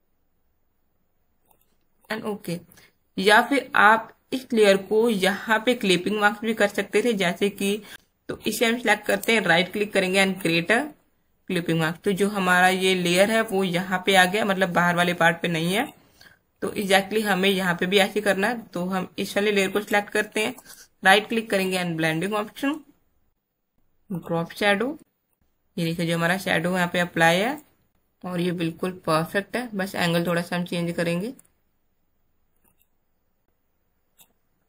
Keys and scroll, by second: 16.5 space.